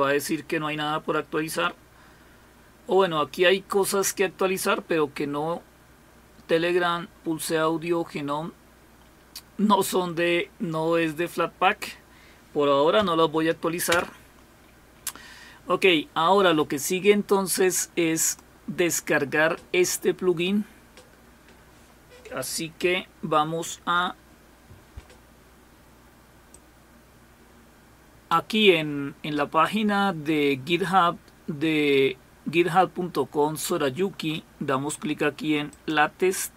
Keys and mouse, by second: 18.2 click, 22.8 ctrl+-, 23.6 ctrl+-, 26.5-28.8 drag, 35.7 click.